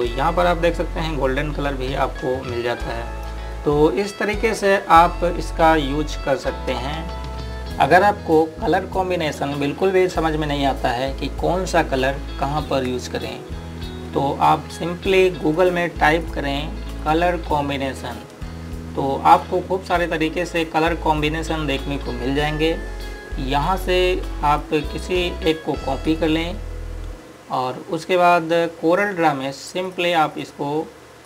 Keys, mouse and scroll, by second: 1.2 click, 16.2 click, 18.8 scroll up 1, 20.1 click, 27.3 right click, 29.6 click.